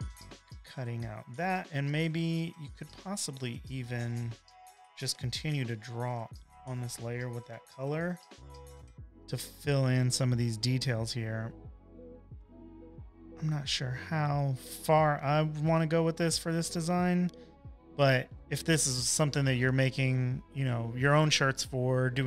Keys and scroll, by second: 1.2 space, 1.7 space, 4.2 i, 6.5 b, 7.5 b, 7.9 ], 8.5 ].